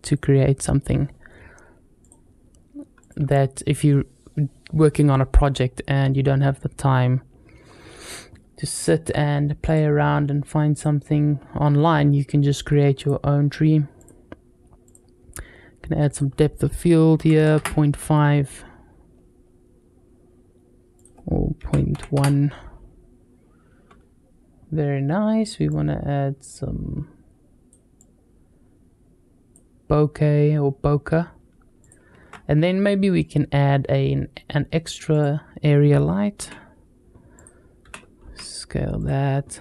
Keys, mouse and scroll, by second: 1.8 click, 3.1 click, 9.4 click, 10.5 click, 12.8 click, 13.8 click, 15.9-17.9 drag, 18.9-19.8 scroll up 1, 20.8-23.0 drag, 25.5-27.5 drag, 27.8-29.4 drag, 31.6 click, 32.0 shift+a, 36.2 s, 37.6 g.